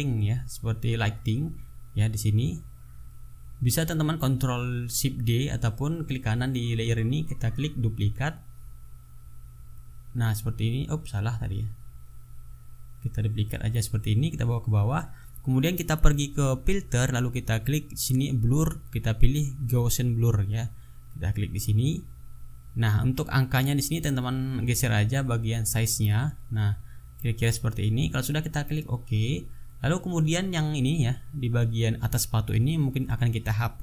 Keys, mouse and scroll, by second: 7.3 right click, 9.0 click, 10.6 ctrl+z, 10.6 ctrl+right click, 12.1 click, 13.5 click, 15.3 click, 16.7 click, 18.1 click, 21.3 click, 25.1 click, 28.8 click, 32.0-32.3 ctrl+scroll up 2, 33.5 ctrl+scroll up 1.